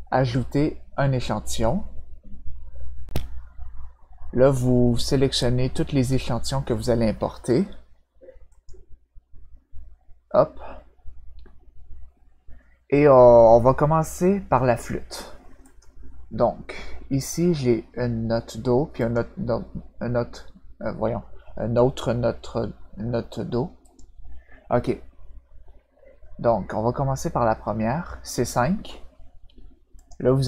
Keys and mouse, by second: 1.4 click, 5.4-6.8 drag, 8.5 click, 15.6 click, 18.9 click, 23.8 click, 29.9 click.